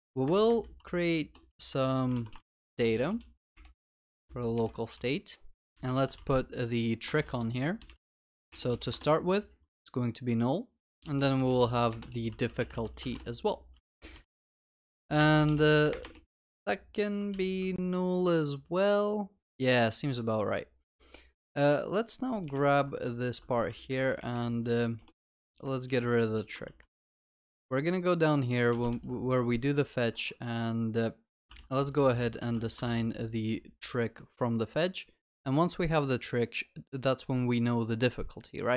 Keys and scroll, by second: 17.4 ctrl+s, 23.2 ctrl+x, 25.9 ctrl+BackSpace, 26.7 ctrl+s, 28.9 ctrl+v, 32.5 ctrl+s.